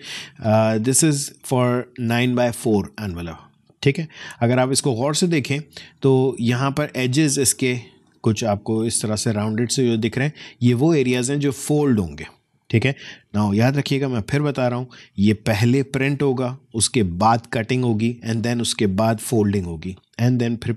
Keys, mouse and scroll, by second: 0.7 alt+space, 0.8 alt+scroll up 1, 2.7 space, 3.0 click, 3.2 space, 5.4 scroll up 2, 6.5 space, 6.7 click, 7.0 space, 8.1 click, 8.2 space, 9.7 click, 9.9 space, 13.5-14.0 alt+scroll down 1.